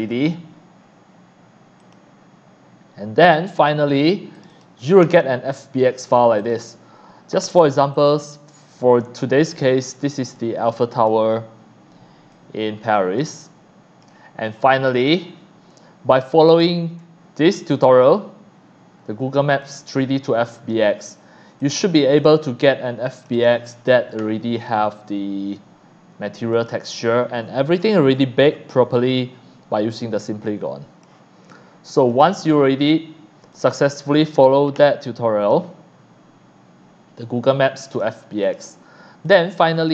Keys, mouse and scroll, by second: 0.0 click, 1.8 click, 3.2 click, 4.3 click, 4.5 click, 7.9 click, 12.6 shift+click, 12.9 shift+click, 13.4 click, 13.9 click, 14.9 click, 16.5 click, 19.6-20.7 drag, 21.6 click, 22.2 click, 23.2 click, 26.5 click, 27.0-27.8 scroll down 3, 28.5 shift+scroll down 1, 28.9-31.0 drag, 32.1 click, 33.5 click, 35.4 click, 37.5 click, 38.4 click, 39.2 click, 39.5 scroll down 1.